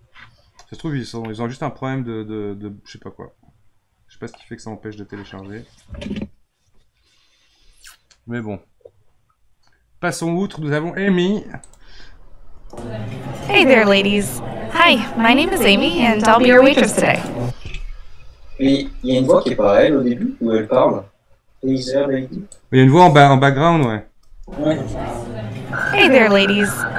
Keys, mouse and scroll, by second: 1.2-4.3 middle drag, 5.8-8.9 drag, 11.6-12.5 drag, 12.5 space, 17.2-20.3 drag, 22.6-24.2 drag, 24.2 space.